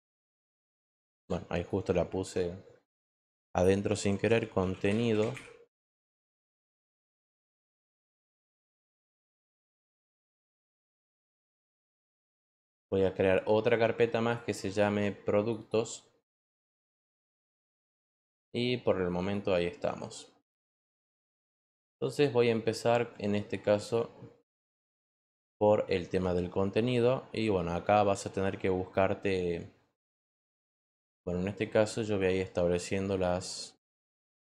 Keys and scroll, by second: 4.2-5.7 typing, 16.3-18.5 typing.